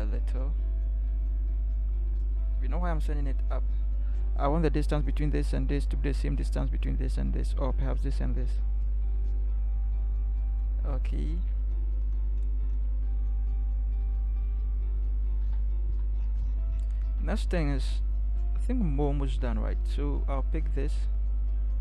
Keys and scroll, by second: 0.2 Up, 1.1 Up, 2.5 ctrl+=, 3.3 ctrl+=, 9.2 Up, 9.7 Up, 14.0 ctrl+0, 15.4 ctrl+=.